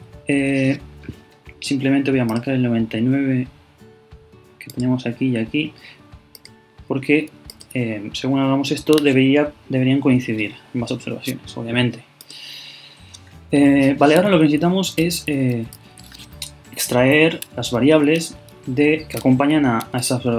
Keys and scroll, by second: 14.5 super+Left.